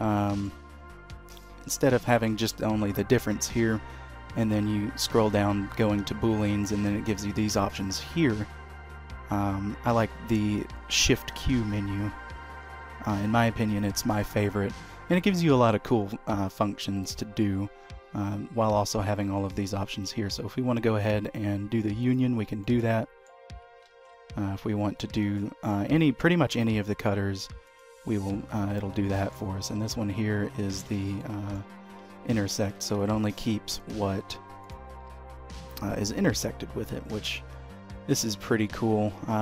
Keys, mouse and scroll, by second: 0.1-1.1 scroll up 2, 0.5 shift+middle click, 1.4 shift+click, 2.0 q, 12.5 shift+q, 22.8 middle click, 24.0 ctrl+z, 25.4 shift+q, 28.4 middle click, 29.9 h, 30.6 scroll down 1, 31.1 ctrl+z, 31.3 middle click, 32.1 h, 33.1 ctrl+z, 33.9 click, 34.8 click, 35.2 g.